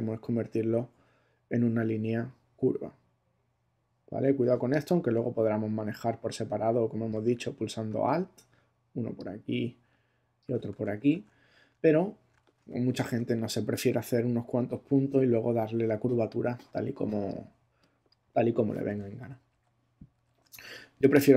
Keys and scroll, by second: 10.7 alt+super+z, 12.6 alt+super+space, 13.4 space, 19.2 super+-.